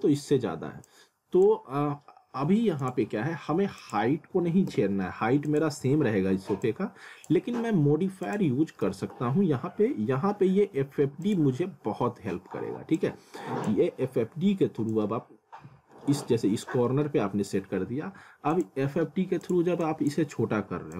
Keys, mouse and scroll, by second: 0.9 click, 4.2 click, 7.1 click, 8.8 f, 11.3 click, 13.9 scroll up 1, 14.9 click.